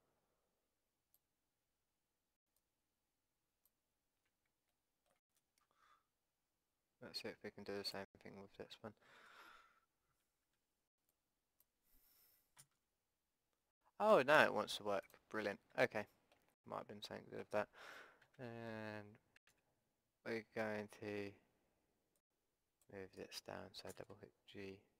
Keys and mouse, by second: 2.5-4.5 drag, 4.7 middle click, 7.9-9.9 drag, 9.1 a, 9.9-13.9 middle drag, 10.5 b, 12.6 g, 16.1 click, 16.1 middle click, 16.3 click, 17.1-18.3 middle drag, 18.3 a, 19.5 b, 23.9 g.